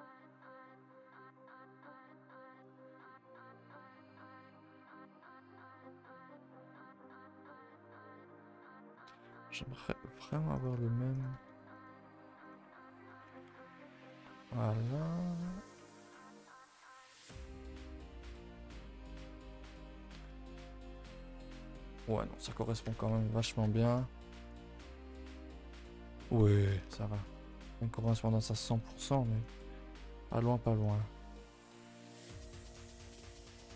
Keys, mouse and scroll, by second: 0.0 click, 9.1 click, 13.1 click, 14.8 click, 17.6 click, 20.1 click, 24.1 scroll down 4, 24.4 shift+middle click, 24.7 click, 24.9 scroll up 2, 28.3 middle drag, 29.3 click.